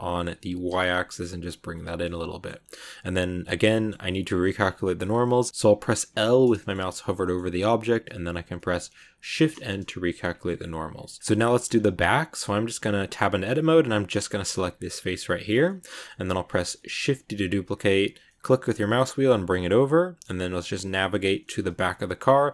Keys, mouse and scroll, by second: 1.9-6.0 middle drag, 6.0 l, 6.2 scroll down 1, 6.3 scroll up 1, 6.4-9.2 middle drag, 9.2 shift+n, 9.5 scroll down 2, 9.7 middle click, 10.2 Tab, 10.4-11.6 middle drag, 11.6-12.5 scroll up 1, 12.5 Tab, 14.0 right click, 15.4 scroll down 2, 15.5-16.9 middle drag, 16.9 shift+d, 19.6-21.7 middle drag, 21.7 scroll up 2.